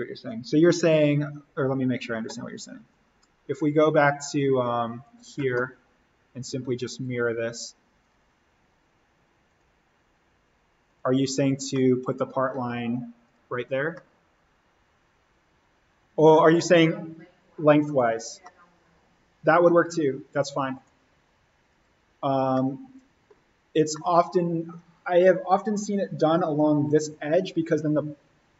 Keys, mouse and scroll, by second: 0.4 click, 2.8-5.7 drag, 5.7-6.9 scroll up 1, 6.9 click, 11.7-13.2 middle drag, 13.2 click, 13.5-13.9 scroll up 1, 13.9 middle click, 14.6-15.0 scroll up 1, 17.8 click, 18.4-20.7 middle drag, 20.7 click, 22.5 middle click, 23.5-23.9 scroll down 1, 23.9 middle click, 24.7-26.7 scroll down 1.